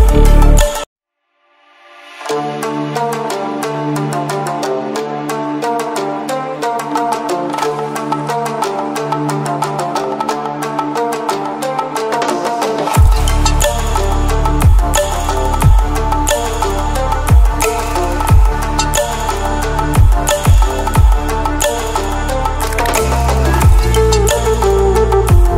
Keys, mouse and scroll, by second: 0.3-14.8 drag, 14.8 ctrl+alt+scroll down 1, 15.2 ctrl+alt+scroll up 1, 16.5-18.7 alt+shift+drag, 19.6 ctrl+alt+scroll down 1, 21.4 Delete, 21.7 click.